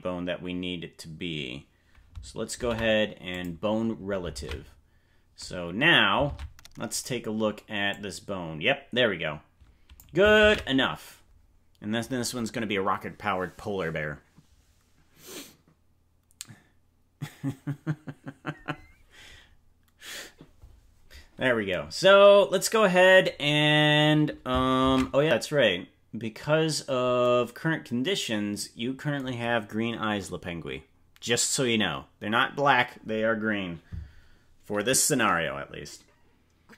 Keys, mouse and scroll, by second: 2.5 ctrl+p, 4.3 ctrl+Tab, 6.3 ctrl+Tab, 7.1 right click, 7.8-10.0 drag, 10.7 ctrl+z, 26.5 ctrl+s.